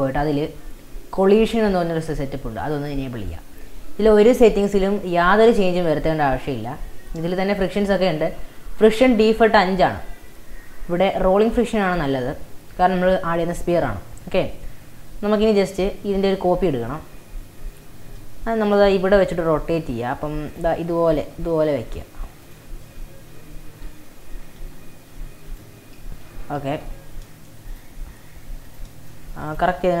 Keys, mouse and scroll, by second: 2.7-3.6 drag, 3.6 scroll down 3, 6.2-6.8 scroll down 5, 8.2-9.8 scroll down 1, 17.6 shift+d, 19.0 r, 20.7 g, 21.4 r, 22.9 middle click, 23.6 Tab, 24.5 a, 24.8 x, 26.0 ctrl+z, 26.6 ctrl+z, 27.7 click, 28.0 Tab, 28.5 scroll up 1, 28.7-29.0 drag, 29.1-29.5 shift+middle drag, 29.5-30.0 drag.